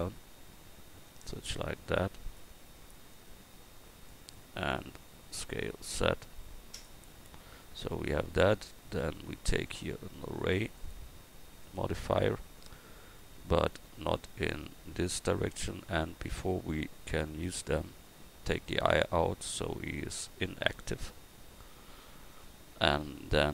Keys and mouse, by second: 1.5 click, 3.2 click, 5.4 s, 11.8-16.1 drag, 16.1 Tab, 16.5 Tab, 19.7-23.5 drag.